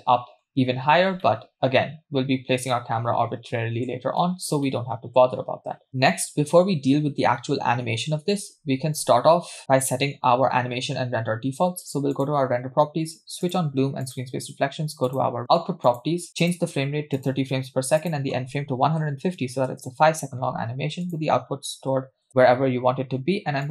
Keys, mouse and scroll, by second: 1.2-1.9 middle drag, 2.1-2.5 scroll up 2, 2.8-3.1 shift+middle drag, 3.5-3.9 middle drag, 4.2 shift+middle drag, 4.6-5.3 middle drag, 5.8 scroll down 1, 12.2 click, 13.5 click, 14.1 click, 15.1 click, 15.9 click, 16.4-17.3 drag, 18.0-19.7 drag, 21.0-22.3 drag, 21.9 /, 22.7-23.6 scroll down 2, 23.6-23.7 drag.